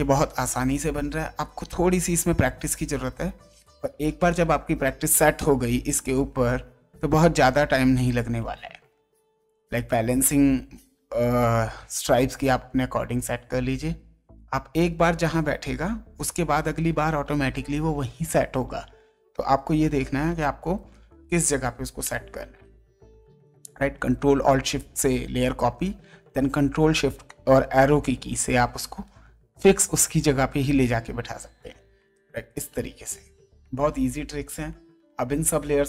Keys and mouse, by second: 1.4 ctrl+shift+Down, 3.1 ctrl+shift+Down, 7.8 ctrl+shift+Down, 9.4 ctrl+shift+Down, 10.9 ctrl+shift+Down, 12.6 ctrl+shift+Down, 13.7 ctrl+shift+Down, 14.8 ctrl+shift+Down, 15.5 ctrl+shift+Up, 16.5 ctrl+shift+Down, 22.0 space, 26.1 ctrl+shift+Down.